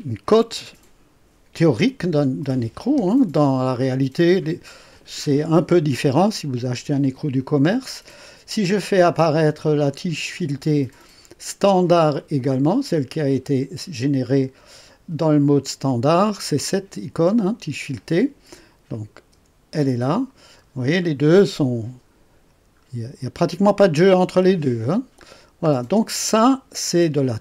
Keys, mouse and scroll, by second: 18.9 click, 19.3 space, 20.6-20.9 scroll up 3, 22.8 scroll up 2, 25.2-25.7 scroll down 2.